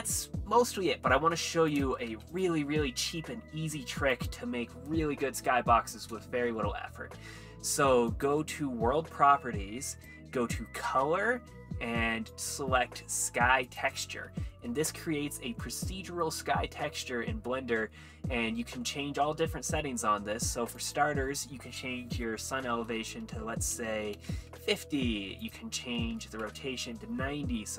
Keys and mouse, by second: 1.7 click, 4.1 click, 4.1 x, 8.1 click, 9.9 click, 12.3-13.8 drag, 14.6 middle click, 15.6 middle click, 16.4 middle click, 17.5 middle click, 18.0 middle click, 18.9 middle click, 20.8-24.5 drag, 25.4 click, 27.6 middle drag.